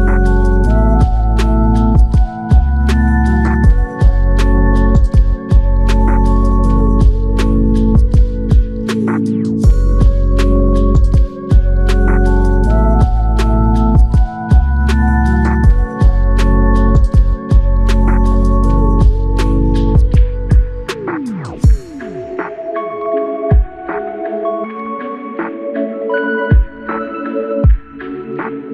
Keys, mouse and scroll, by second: 4.1 double click, 9.9 alt+click, 11.7 typing, 16.8 alt+click.